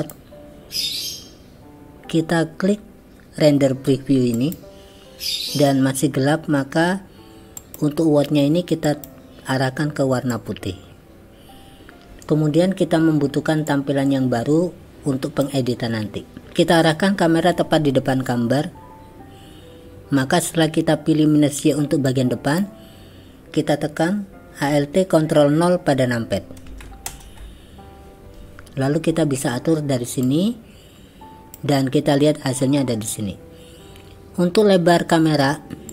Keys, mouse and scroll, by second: 0.0 click, 4.4 click, 7.6 click, 9.0 click, 13.8-15.5 drag, 22.1 click, 27.1 ctrl+alt+KP_0, 30.3-31.6 drag.